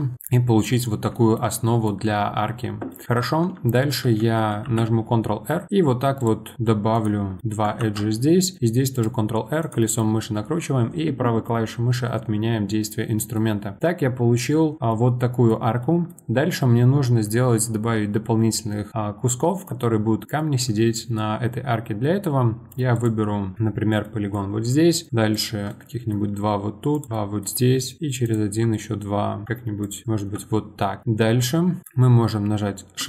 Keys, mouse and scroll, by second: 3.2 Tab, 4.0 Tab, 4.6 ctrl+r, 7.4 middle click, 7.8 ctrl+r, 10.0-14.8 middle drag, 14.8 scroll down 1, 14.9-18.8 middle drag, 19.6 scroll down 1, 19.6-22.9 middle drag, 22.9 click, 24.0-25.1 middle drag, 25.3 shift+click, 25.7-26.9 middle drag, 26.9 shift+click, 27.1 middle click, 28.2 shift+click, 28.7-29.8 middle drag, 29.8 shift+click, 30.4-31.8 middle drag.